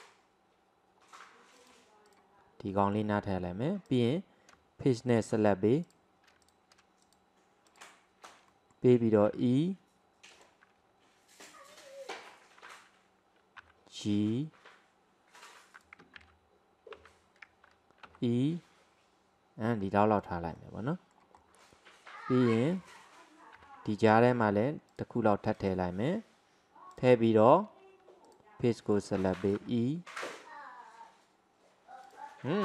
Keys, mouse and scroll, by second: 2.7-3.9 middle drag, 3.9 click, 5.2 alt+shift+click, 5.9 alt+shift+click, 6.4 click, 7.1 alt+shift+click, 7.7 alt+shift+click, 8.6 middle click, 9.4 e, 13.6 g, 16.2 ctrl+z, 17.1 ctrl+z, 18.2 e, 20.6-23.6 middle drag, 23.6 ctrl+r, 27.0 click, 28.3 alt+drag, 28.8-29.7 middle drag, 29.7 e.